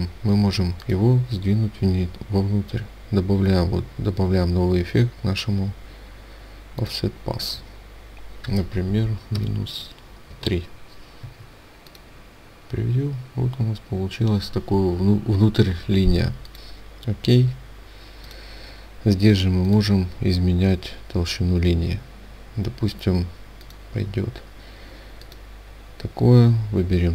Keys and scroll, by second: 10.7 Tab.